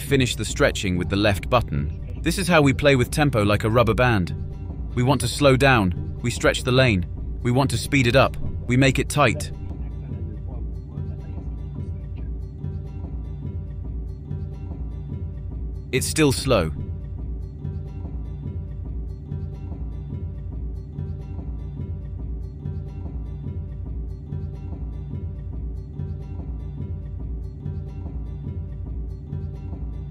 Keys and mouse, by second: 3.2 s, 6.0 typing, 7.2 click, 20.1 click, 21.6 click, 23.2 s, 27.3-27.8 drag, 28.1 click.